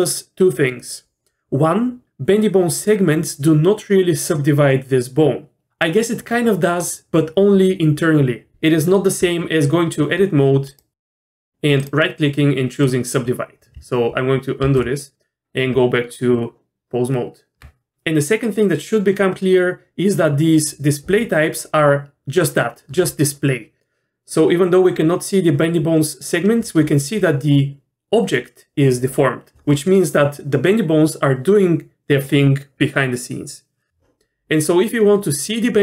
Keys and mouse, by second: 9.2 Tab, 10.7-11.4 right drag, 11.9 right click, 14.6 ctrl+z, 15.7 Tab.